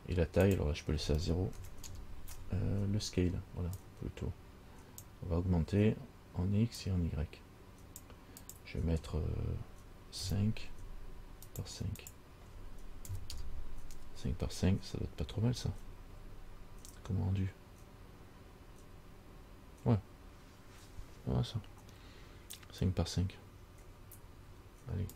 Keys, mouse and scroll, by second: 0.7 click, 4.0 click, 7.0 click, 8.6 click, 12.3 click, 16.5 scroll up 1.